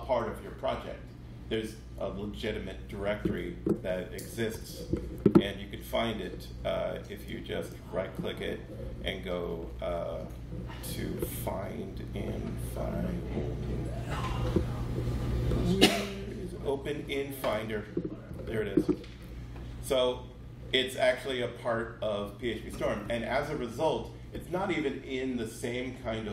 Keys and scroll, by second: 4.5 super+1.